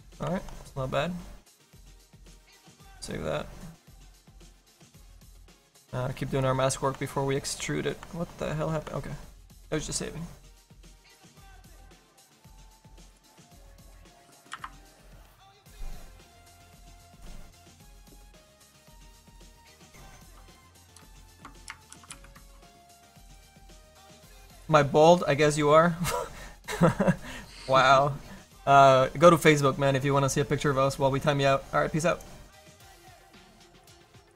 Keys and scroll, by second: 5.4 f.